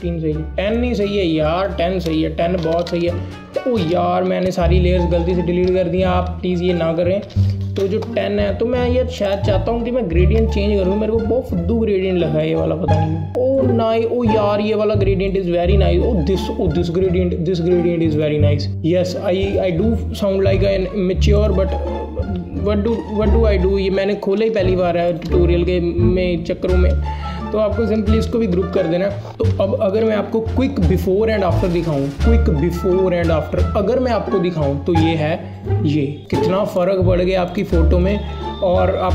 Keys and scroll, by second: 2.7 BackSpace, 2.9 BackSpace, 4.5 ctrl+z, 5.7 z, 7.4 KP_1, 7.4 KP_0, 7.7 e, 28.3 ctrl+g, 29.0 ctrl+alt+g, 30.1 ctrl+alt+g.